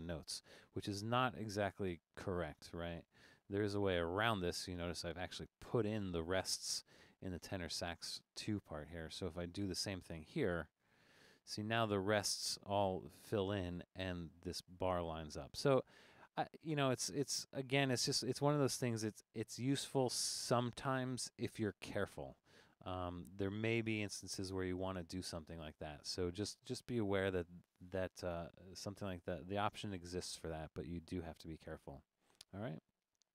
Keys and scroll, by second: 3.9 super+z, 16.8 super+z.